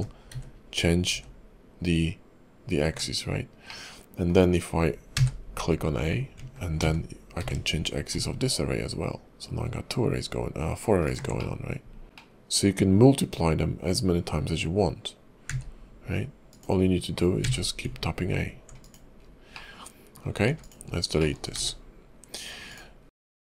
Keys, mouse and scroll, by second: 3.7 middle click, 11.4 middle click, 12.0 scroll up 2, 12.1 middle click, 15.5 q, 19.2 scroll down 4, 19.5 middle click, 20.5 x, 20.9 scroll up 2, 21.2 middle click, 21.6 shift+a.